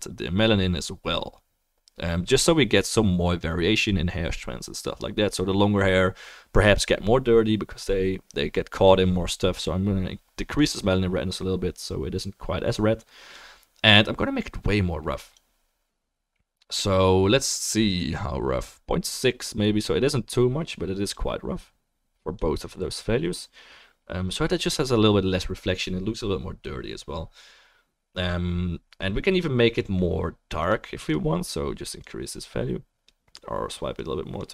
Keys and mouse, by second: 23.2-31.2 drag, 23.2-32.8 middle drag, 23.2-34.5 right drag, 33.9-34.5 drag, 33.9-34.5 middle drag.